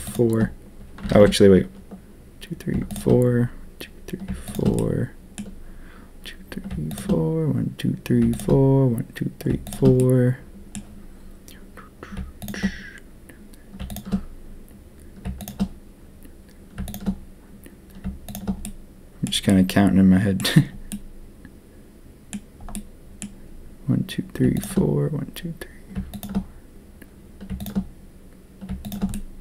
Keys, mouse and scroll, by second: 1.1 ctrl+z, 4.4 shift+click, 4.7 click, 6.8 shift+click, 8.3 shift+click, 9.6 shift+click, 9.9 click, 13.8 shift+click, 16.8 shift+click, 18.2 shift+click, 18.6 click, 19.4 click, 20.8-22.3 middle drag, 22.7 middle click, 26.0 shift+click, 27.5 shift+click, 29.1 click.